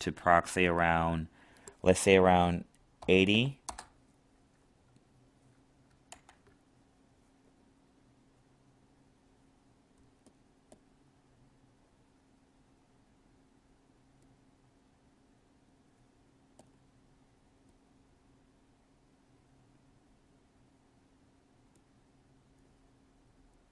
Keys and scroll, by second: 6.0 ctrl+z.